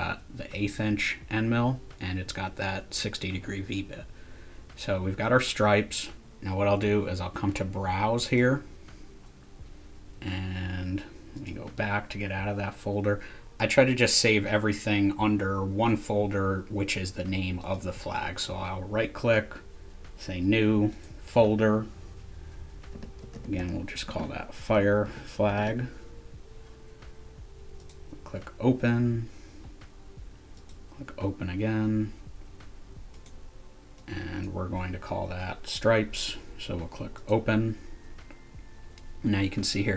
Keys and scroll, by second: 22.7-25.4 typing, 27.9 typing.